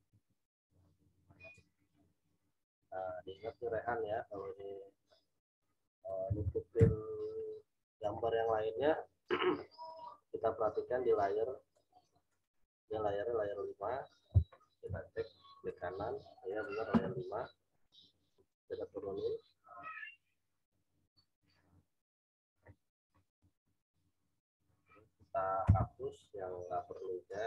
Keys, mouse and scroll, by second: 0.9 shift+click, 6.8 Return, 11.7 click, 14.8 v, 15.6 right click, 16.5-25.6 drag, 25.6 e, 27.2-27.4 drag.